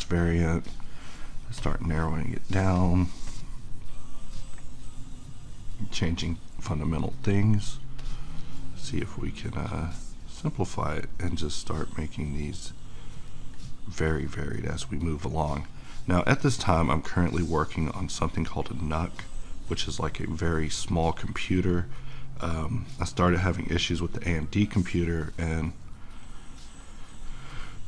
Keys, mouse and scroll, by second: 11.9 click, 12.0-27.8 drag.